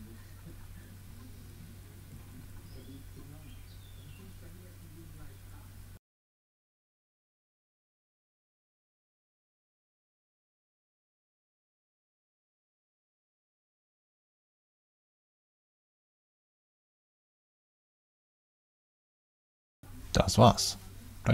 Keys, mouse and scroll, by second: 1.0 click, 1.5-2.8 drag, 3.4 click, 5.3 click, 6.3 click, 8.8-9.1 drag, 10.2 typing, 11.9-13.5 typing, 12.3 Return, 13.1 click, 13.5 click, 14.1 click, 17.1-19.2 typing, 19.2 click.